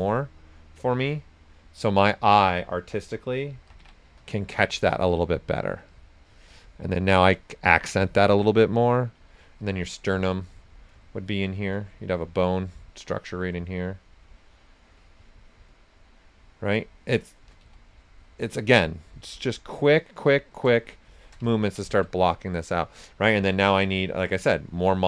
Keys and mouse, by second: 4.2 click, 9.3-17.6 alt+drag, 18.2 alt+click, 20.7 shift+click, 21.5-23.7 ctrl+right drag, 23.7 s, 23.7 click.